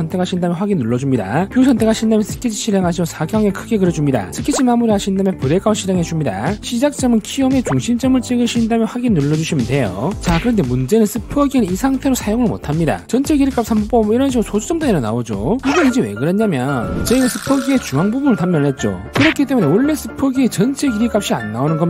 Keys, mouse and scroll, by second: 2.7 click, 3.2 s, 3.8 3, 4.0 click, 4.5 right click, 5.6 click, 6.5 c, 8.8 click, 9.8 click, 14.1 click, 14.8 click, 21.0 click.